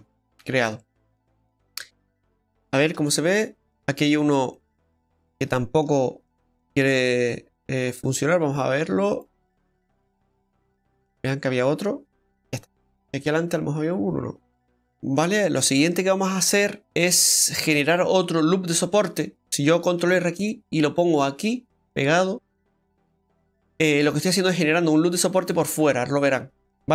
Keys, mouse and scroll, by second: 0.1 scroll up 1, 0.8 middle click, 0.8 scroll up 4, 1.4 shift+middle click, 2.0 middle click, 3.0 Tab, 3.2-3.8 scroll down 2, 3.8 middle click, 4.3 scroll up 1, 4.5 middle click, 5.1 Tab, 5.5 shift+middle click, 6.0-6.8 scroll up 6, 8.1 alt+shift+right click, 9.1 click, 10.0 click, 11.4 click, 12.3 scroll down 3, 12.9 scroll down 3, 12.9 middle click, 14.9 ctrl+z, 14.9-15.4 scroll down 1, 15.4 scroll up 2, 15.9 scroll up 1, 16.0 shift+middle click, 16.7 scroll up 1, 16.8 scroll down 1, 17.7 scroll up 1, 18.5-19.0 scroll up 1, 20.0 ctrl+r, 23.3 middle click, 26.5-26.9 scroll up 2.